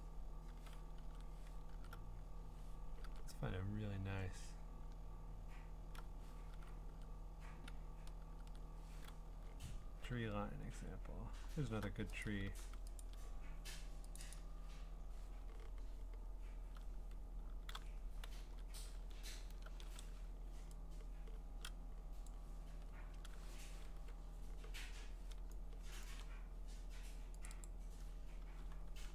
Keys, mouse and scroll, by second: 1.0 ctrl+Tab, 1.7 alt+Tab, 3.0 alt+Tab, 6.5 ctrl+Tab, 6.9 ctrl+Tab, 8.2 ctrl+Tab, 9.2-9.9 scroll, 10.2-11.6 scroll, 12.2 ctrl+click, 12.5 v, 13.0 ctrl+click, 14.2 click, 14.3 click, 14.5 ctrl+click, 15.6-17.0 scroll, 17.7 ctrl+z, 18.3 ctrl+w, 19.1-19.5 scroll, 19.7 ctrl+t, 22.2 click, 23.0 Return, 26.1 click, 27.5 click, 27.6 click, 28.6-29.0 scroll.